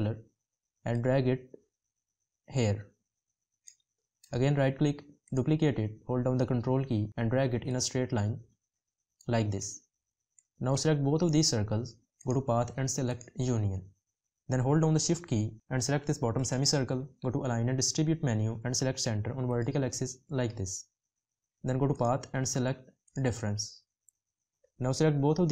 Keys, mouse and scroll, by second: 6.4 ctrl+click, 14.7 shift+click.